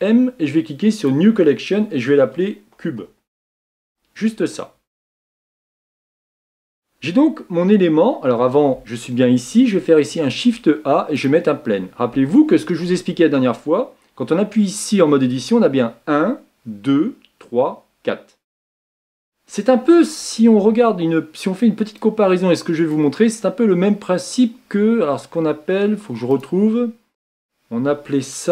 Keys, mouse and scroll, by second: 0.2 m, 3.9 Return, 5.5 click, 11.2 shift+a, 12.4-13.2 shift+middle drag, 13.2-14.6 scroll up 6, 14.6-15.1 scroll down 2, 15.1-18.2 shift+middle drag, 19.5-22.0 middle drag, 22.0-26.4 drag.